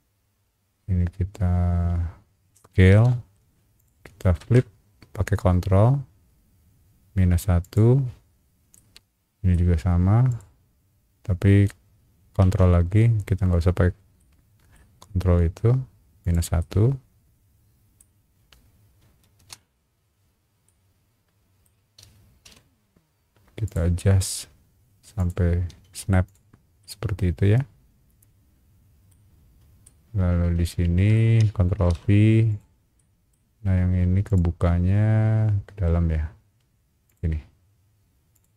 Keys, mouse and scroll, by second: 2.9 s, 3.7 click, 7.6 click, 8.7 middle click, 10.3 click, 14.2 middle click, 16.2 ctrl+click, 16.2 typing, 16.6-18.0 middle drag, 18.6 scroll up 1, 19.3 space, 20.1-20.5 scroll up 2, 20.6 middle click, 22.4 m, 23.6 click, 25.2 click, 25.8 space, 26.2 click, 26.8-29.1 middle drag, 29.3-29.7 scroll down 2, 29.8-31.1 middle drag, 31.8 ctrl+v, 32.5 click, 33.0 middle click, 34.2 click, 37.0 click, 38.3 click.